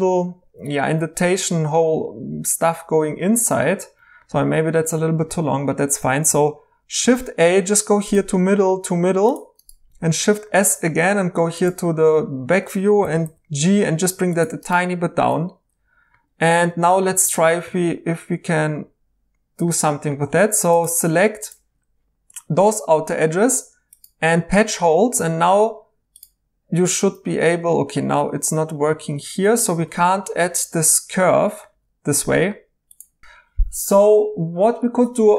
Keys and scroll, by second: 7.0 a, 10.0 s, 13.0 typing, 15.3 2, 29.5 Tab, 29.7 Tab, 30.1 Tab, 31.6 Escape.